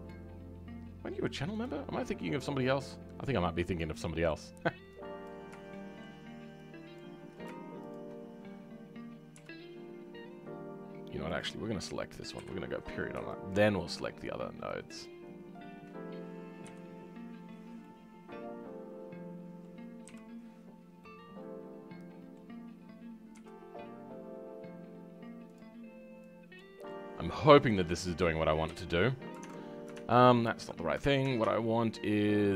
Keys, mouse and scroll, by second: 2.2-3.5 middle drag, 3.6 scroll up 5, 3.9-6.9 middle drag, 6.9 shift+click, 9.3 KP_5, 11.3 click, 12.3 KP_Decimal, 13.4 shift+click, 13.7-15.0 shift+middle drag, 15.0 shift+click, 17.8-20.0 middle drag, 20.0 KP_5, 21.0-23.4 middle drag, 23.4 r, 26.8-28.6 middle drag, 28.6 KP_5, 28.9-29.6 scroll down 6.